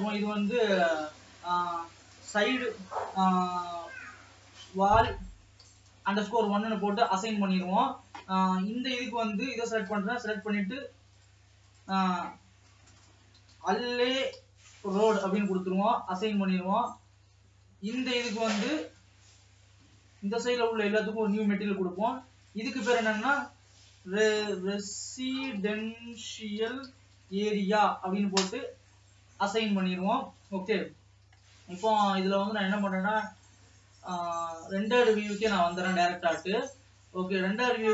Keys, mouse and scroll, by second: 5.9 l, 6.9-8.3 drag, 8.3 alt+a, 9.1 l, 10.4-15.2 drag, 15.2 l, 16.2 click, 16.9 a, 18.2 l, 19.7 l, 20.1 l, 20.3 l, 20.5 l, 21.3-28.3 drag, 29.4 click, 30.2-30.7 scroll up 3, 30.7 alt+a, 31.9 ctrl+s, 34.5-36.3 drag, 36.3 Tab, 37.6 alt+a.